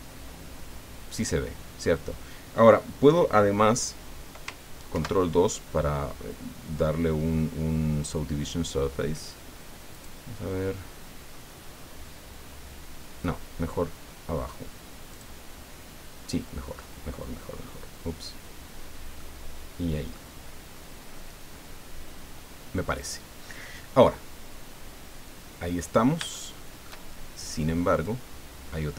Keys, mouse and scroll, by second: 1.5 scroll down 2, 4.9 ctrl+2, 9.9 click, 15.1 click, 16.7 scroll up 2, 17.7 scroll down 2, 19.2-20.3 drag, 25.8 scroll down 1, 26.3 shift+click, 28.0-28.9 drag.